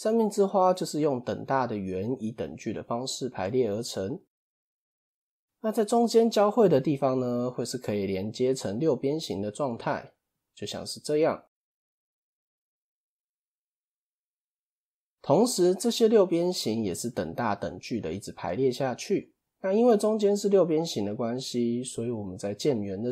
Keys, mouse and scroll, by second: 4.8 scroll up 1, 6.8 d, 7.3-8.0 drag, 8.0 d, 8.2-8.7 drag, 8.7-9.2 d, 9.3-10.9 drag, 10.9-18.7 typing, 11.0-11.7 drag, 12.3-12.7 drag, 13.4 click, 14.1 click, 15.2-15.8 drag, 15.9-16.7 drag, 16.9-17.4 drag, 17.9-18.5 drag.